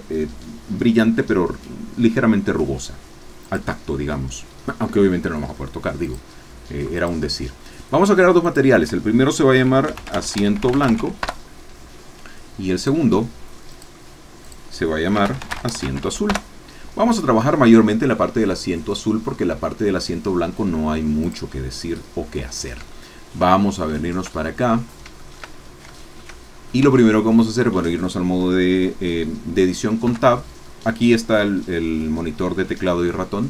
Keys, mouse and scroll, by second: 3.4 click, 6.0 click, 7.0 click, 8.5-9.6 drag, 9.6-11.0 typing, 11.4 Return, 12.7 click, 13.7 click, 14.4 click, 15.1-16.0 typing, 16.5 Return, 21.3 click, 22.2-23.5 middle drag, 23.6 shift+scroll up 1, 24.0 shift+middle click, 24.9 shift+scroll up 1, 25.2 shift+middle click, 26.0 shift+middle click, 26.8 shift+Tab, 26.9 shift+scroll up 2, 30.0 3.